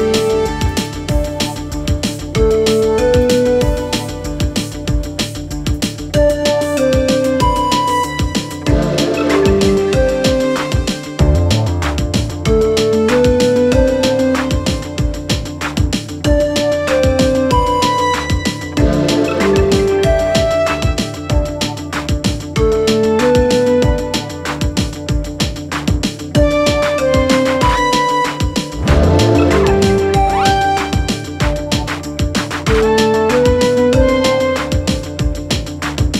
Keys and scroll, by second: 1.2 Delete, 8.3 ctrl+d, 8.4 Escape, 9.7 ctrl+z, 11.4 Delete, 23.1 4, 26.0 F9, 27.9 4, 28.2 4.